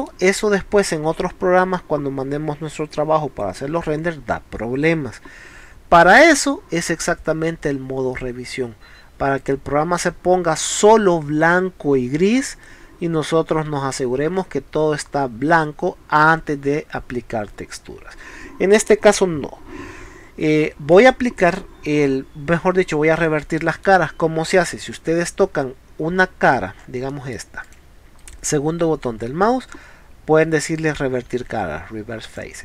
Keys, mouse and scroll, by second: 4.8 scroll up 1, 9.4 click, 10.1-10.6 scroll down 4, 14.3 scroll up 2, 17.9 scroll down 2, 18.9 middle click, 22.1 scroll down 2, 24.7 scroll down 2, 26.4 scroll up 1, 27.1 middle click, 27.7 click, 28.2 right click, 32.3 click.